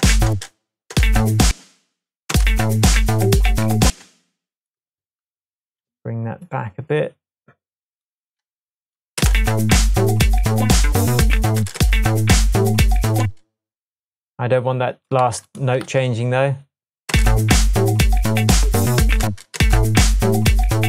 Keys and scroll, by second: 0.0 space, 1.0 space, 1.5 space, 2.3 space, 3.9 space, 5.7 e, 9.2 space, 11.6 space, 13.2 space, 15.3 super+c, 15.9 super+v, 18.1 space, 19.3 space.